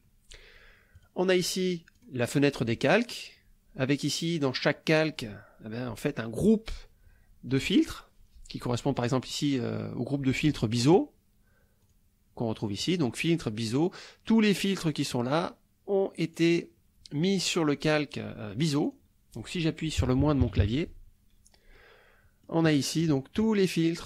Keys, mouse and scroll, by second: 1.0 click, 2.0 click, 9.0 click, 11.8 click, 16.4 click, 18.9 click, 20.0 KP_Subtract, 21.8 middle click, 22.4 click, 22.7 middle click, 22.9 click.